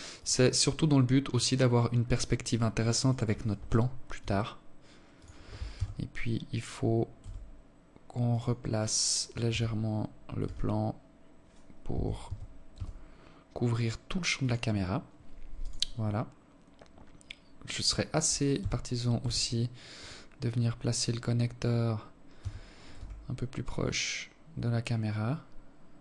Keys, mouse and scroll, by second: 2.1 right click, 3.2 s, 4.8 g, 8.4 g, 11.2 g, 14.6 right click, 17.4 g, 21.2 g.